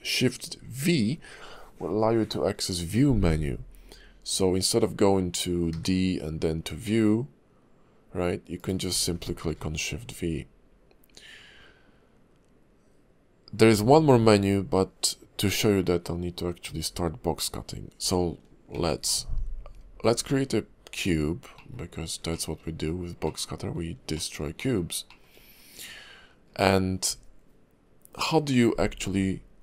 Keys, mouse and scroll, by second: 0.4 shift+v, 5.7 d, 9.5 shift+v, 18.7 shift+a, 21.5 middle click, 21.9 scroll down 2, 22.3 shift+middle click, 22.6-23.2 scroll up 2, 23.2 middle click, 24.1 shift+middle click, 24.6 middle click, 25.1 shift+middle click, 25.4-25.9 scroll down 1, 28.3 middle click.